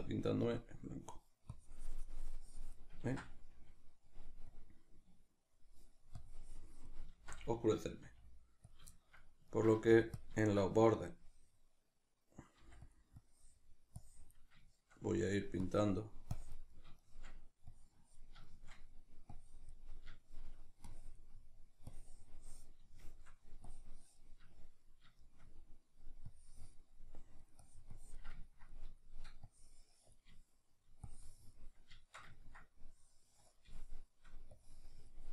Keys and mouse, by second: 1.0-8.7 drag, 3.0 ctrl+z, 7.1 ctrl+z, 8.0 f, 8.9-10.2 shift+middle drag, 9.7 f, 10.2 click, 10.4 shift+middle click, 11.0-12.9 drag, 12.6 f, 14.7-15.7 shift+middle drag, 15.7-16.7 drag, 16.7-17.7 shift+middle drag, 17.7 click, 18.5 shift+middle click, 19.3 click, 19.9 middle click, 20.9 click, 21.3 middle click, 21.9-22.9 drag, 22.9 shift+middle click, 23.7 click, 24.5-26.3 shift+middle drag, 26.3 click, 27.0 middle click, 27.5-28.5 drag, 28.5-29.5 ctrl+middle drag, 29.5 click, 30.4 shift+middle click, 31.1 click, 31.7-32.9 middle drag, 32.9 click, 33.7 shift+middle click, 34.5-35.3 drag.